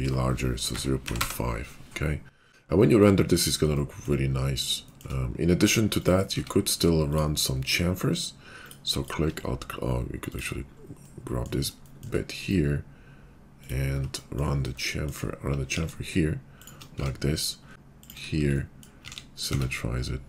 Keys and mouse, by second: 6.1-7.1 middle drag, 6.3 Tab, 7.1 click, 7.3-8.6 middle drag, 8.6 click, 8.8 alt+middle click, 9.0 alt+click, 9.1-10.3 alt+middle drag, 10.3 click, 10.4-15.3 middle drag, 15.7 ctrl+b, 16.1 shift+middle click, 17.1 Tab, 17.8 ctrl+shift+b, 19.0 alt+click, 19.1 alt+x, 19.1-20.2 middle drag, 19.5 Tab.